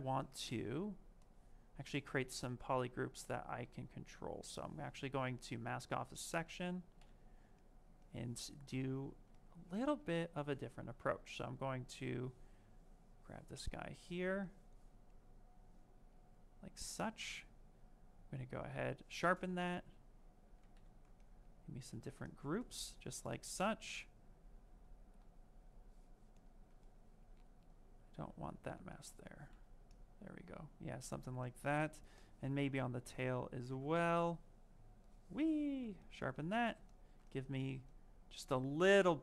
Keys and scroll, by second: 19.1 ctrl+w, 25.1 ctrl+z, 36.2 ctrl+w.